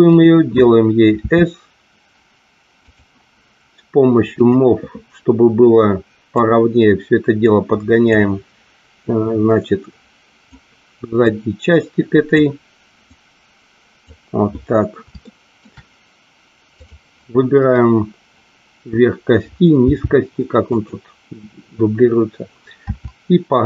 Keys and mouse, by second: 0.1 click, 1.1 s, 2.7 click, 4.3 click, 6.3-8.1 drag, 9.0-10.5 drag, 11.2-12.3 drag, 13.0-14.1 drag, 15.2 shift+middle click, 16.8 click, 19.9 g, 20.7 click, 22.9 e.